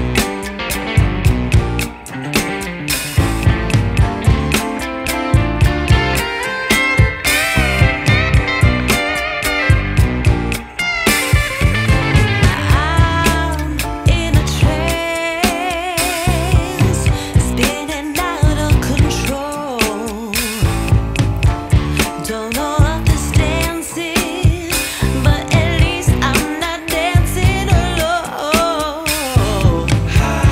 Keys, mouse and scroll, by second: 0.8-3.0 drag, 3.3-4.7 drag, 4.7-6.3 scroll down 3, 6.3 click, 6.6-7.6 scroll down 3, 7.6-11.9 drag, 12.8-19.5 drag, 19.5-21.5 scroll down 5, 21.5 click, 22.1-22.6 scroll down 4, 22.6 middle click, 23.5-24.3 scroll down 5, 24.3-26.0 scroll down 1, 26.0-27.4 drag, 27.4 Tab, 27.9-30.0 right drag, 30.0-30.5 drag.